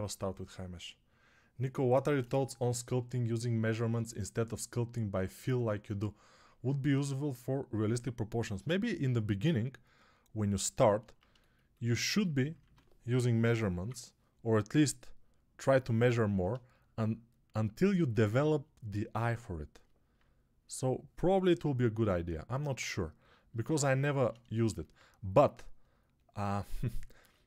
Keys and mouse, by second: 12.5-13.7 typing.